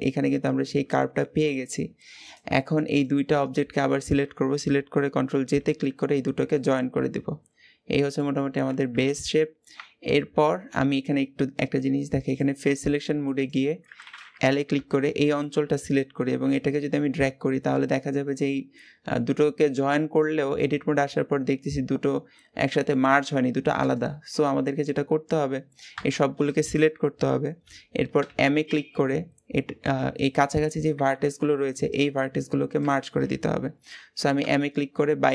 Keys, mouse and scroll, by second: 0.4-0.7 scroll down 1, 1.6-2.0 scroll down 2, 2.0 click, 2.7 click, 3.2 shift+click, 5.4 ctrl+j, 6.4-8.7 middle drag, 8.7 KP_1, 9.6 Tab, 10.0-11.3 scroll up 1, 12.0 click, 13.2 click, 14.5 l, 15.4-16.2 scroll down 2, 16.2 g, 24.0-25.8 scroll up 2, 25.8 a, 28.0 m, 30.6-32.7 scroll up 1, 34.2 m.